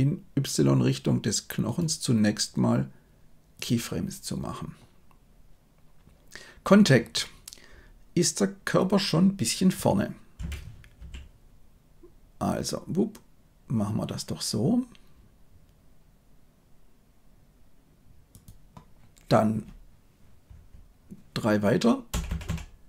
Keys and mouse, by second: 1.8-3.7 middle drag, 22.1 Right, 22.2 Right, 22.4 Right.